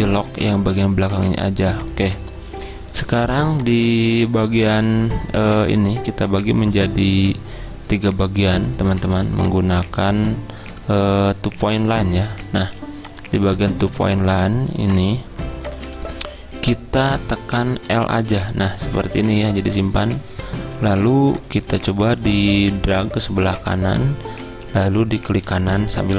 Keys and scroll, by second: 3.0 z, 12.6 z, 17.9 i.